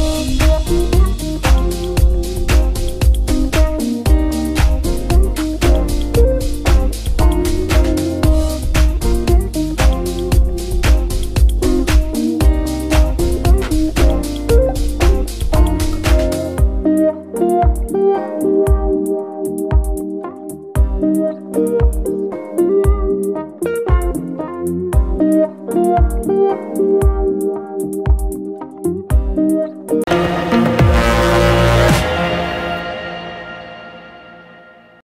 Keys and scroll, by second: 0.3 Escape, 2.8 g, 7.5 Escape, 9.6 g, 10.2 Escape, 11.3 r, 17.7 Escape, 19.8 g, 20.0 y, 25.4 Escape, 25.9 g, 26.9 Escape, 27.4 g, 28.1 Escape, 28.8 g, 29.3 Escape.